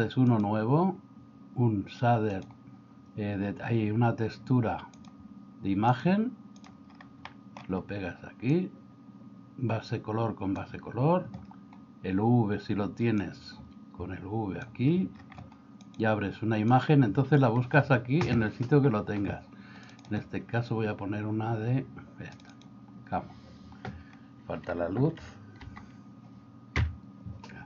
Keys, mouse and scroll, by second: 0.3-6.7 drag, 7.3 middle click, 8.6-10.7 drag, 13.3-14.7 drag, 15.8 click, 16.8 click, 25.6 alt+h, 26.8 KP_Divide.